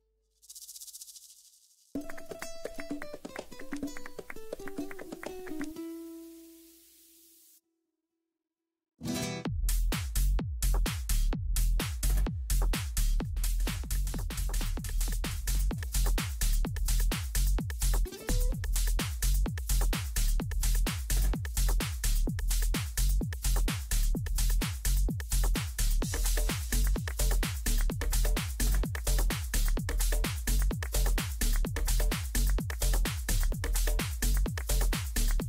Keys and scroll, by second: 0.6 space, 5.6 c, 17.6 ctrl+Home, 18.9 c, 27.9 ctrl+Page_Down, 28.5 Down, 29.1 Right, 33.1 ctrl+g.